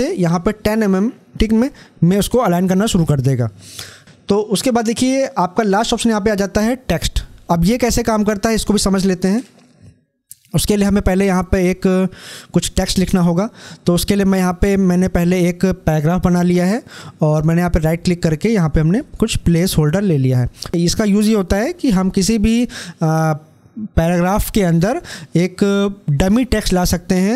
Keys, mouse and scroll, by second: 4.8 click, 7.6 click, 7.7-10.8 drag, 11.0-15.7 drag, 16.7 right click, 18.7 click.